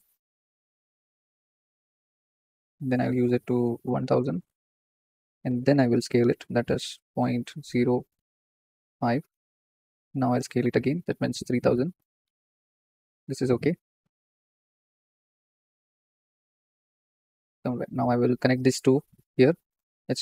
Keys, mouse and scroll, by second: 4.5 KP_0, 8.7 click, 12.2 KP_0, 16.0 click, 17.4-18.5 middle drag, 18.5-19.3 drag, 19.7 ctrl+shift+click.